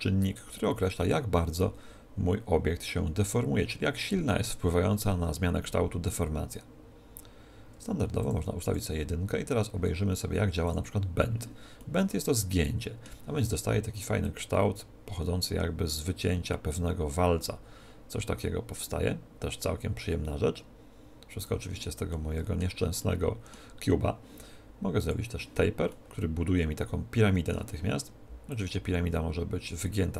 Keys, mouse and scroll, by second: 8.2 click, 10.2-12.6 drag, 11.8-14.2 middle drag, 14.2 click, 22.1-25.0 middle drag, 25.0 click, 25.9-27.7 middle drag, 28.5 click.